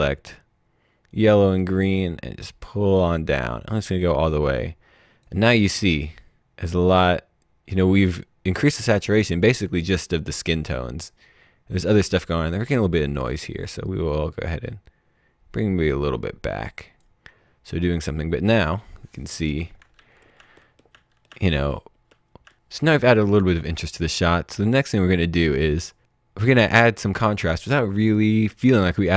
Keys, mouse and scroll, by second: 1.1 right click, 2.0 click, 6.0 click, 13.8 click, 20.3-22.4 typing, 28.0 click.